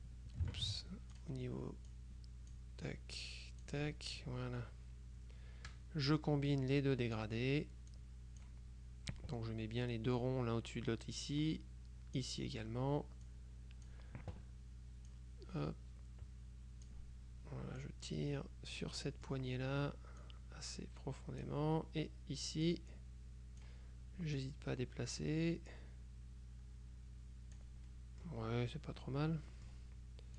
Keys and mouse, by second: 0.7 ctrl+z, 1.2 ctrl+click, 2.0-3.1 drag, 6.2-7.8 drag, 8.0-9.0 drag, 11.3-12.8 drag, 13.4-14.5 drag, 15.2-17.4 drag, 17.9-19.4 drag, 20.3-22.0 drag, 22.7-24.2 drag, 24.4-28.2 drag, 29.6 click.